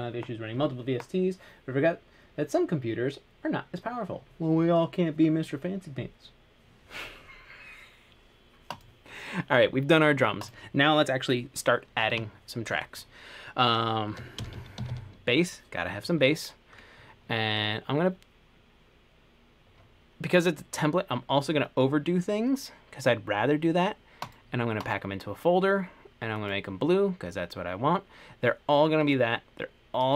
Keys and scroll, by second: 14.3-15.6 typing.